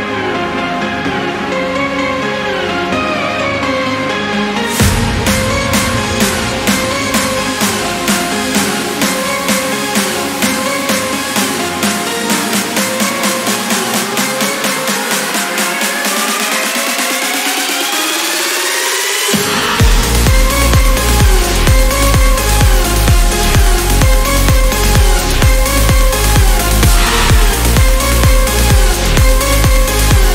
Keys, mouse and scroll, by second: 1.2-1.5 scroll down 2, 1.6-2.0 scroll up 2, 2.4 scroll down 2, 2.8 scroll up 2, 3.9 click, 6.4 click, 8.7 click, 10.0 click, 11.4 click, 12.4-12.8 scroll up 1, 13.0-14.8 scroll up 5, 17.4 click, 19.2 click, 25.2 click, 27.2 click.